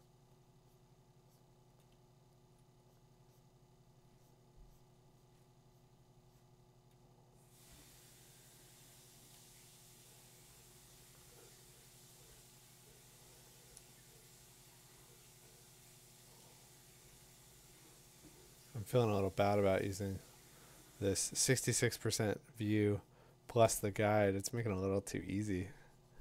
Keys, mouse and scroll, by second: 0.7 click, 2.5 click, 5.5 click, 8.5-12.2 drag, 9.1 2, 15.7-16.2 click, 18.9 click, 20.4 click, 22.9 click, 25.0 ], 25.2 ].